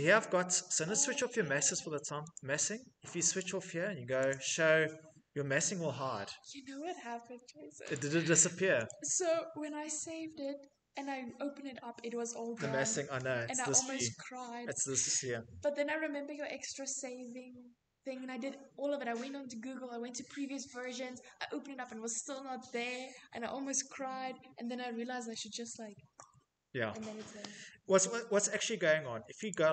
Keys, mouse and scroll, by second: 0.1 middle click, 0.1 middle click, 1.9 click, 2.9 click, 3.9 click, 7.5 click, 8.4 click, 10.2 middle click, 10.2 middle click, 21.7 Escape, 22.0 Escape, 23.4 middle click, 23.6 middle click, 29.0 click.